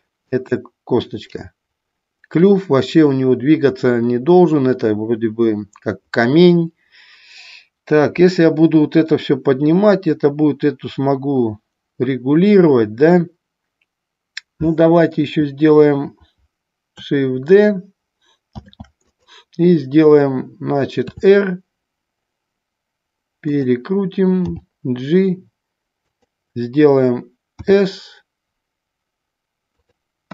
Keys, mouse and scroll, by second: 0.4 click, 18.7 shift+d, 21.2 r, 23.7 click, 24.7 g, 26.2 click, 29.9 click.